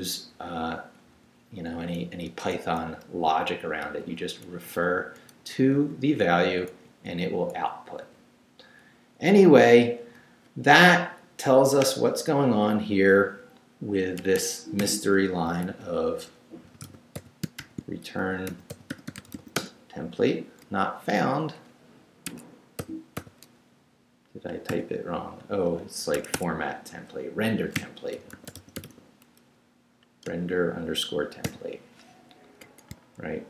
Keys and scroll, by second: 0.3 Right, 2.3 Left, 2.6 Right, 3.1 Left, 3.5 Right, 3.8 Left, 4.3 Right, 4.7 Left, 5.4 Down, 5.8 Left, 6.7 Right, 7.1 Left, 7.5 Right, 8.0 Left, 9.0 Right, 14.2 Escape, 14.8 /, 15.5 r, 16.6-19.9 typing, 22.3 Escape, 22.8 n, 24.7 /, 26.1 Escape, 27.5-29.3 typing, 30.3 Return, 31.4 n.